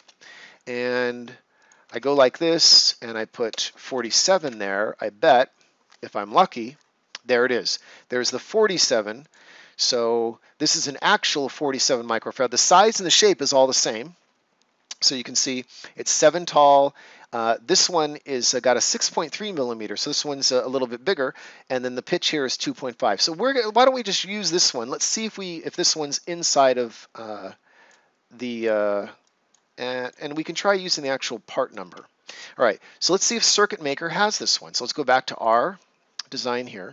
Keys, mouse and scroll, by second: 0.4 scroll up 1, 1.5 click, 3.4-3.8 typing, 4.4 Return, 6.2 scroll down 1, 12.0 scroll down 1, 23.6 scroll up 1, 26.5-33.3 drag, 33.3 click.